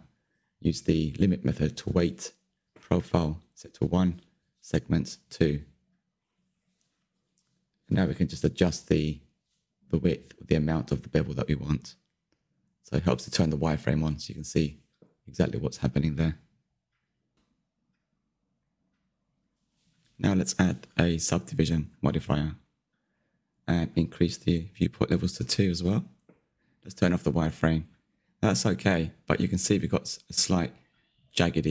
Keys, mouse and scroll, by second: 6.4 middle click, 7.2-7.8 scroll up 4, 7.8-9.6 shift+middle drag, 9.6 q, 11.5-14.3 drag, 17.5 middle click, 17.9 Tab, 20.2 click, 20.5-21.0 scroll down 5, 21.0 scroll up 1, 21.0-22.1 middle drag, 22.1-24.4 scroll up 1, 24.4-27.7 drag, 27.7 q, 28.1-30.9 middle drag, 30.9-31.4 scroll down 3, 31.4-31.7 shift+middle drag.